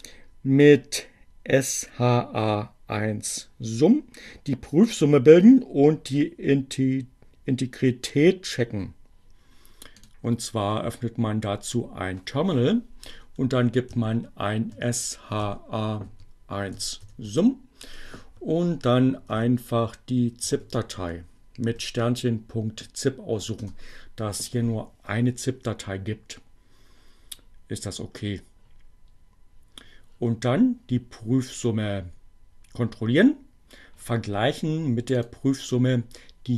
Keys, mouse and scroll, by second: 9.8 click, 13.1 s, 13.4 h, 15.2-18.2 typing, 19.6-21.7 typing, 23.2 Return, 35.1 click.